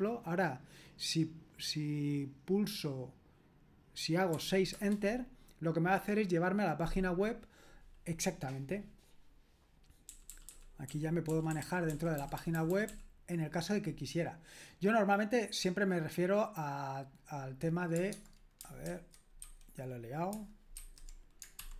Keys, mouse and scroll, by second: 4.3 typing, 4.7 Return, 10.1-12.4 typing, 18.1 alt+Tab, 18.9 super+1, 19.4 super+2, 20.7 super+1.